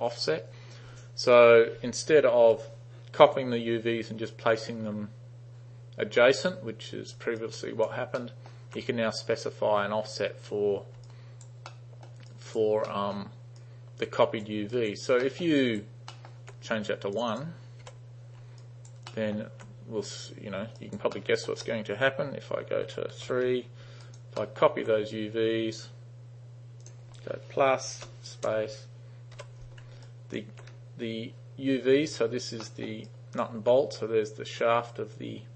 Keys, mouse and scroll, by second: 2.5 u, 7.5 alt+right click, 8.2-8.5 alt+middle drag, 11.1 alt+right click, 11.7-12.1 alt+middle drag, 12.3 alt+right click, 12.9 alt+middle click, 13.6-14.5 alt+right drag, 14.7 alt+right click, 15.3 alt+middle drag, 15.7 alt+right click, 16.1 alt+middle click, 17.2 click, 17.9 1, 18.7 alt+right click, 19.1 alt+middle drag, 20.8 alt+right click, 21.2 alt+middle drag, 23.3 3, 24.1 alt+right click, 24.5 alt+middle click, 25.8 click, 26.9 click, 28.5 space, 29.4 u, 30.1 alt+right click, 32.3 alt+right click, 32.7 alt+middle drag, 33.1 alt+right click.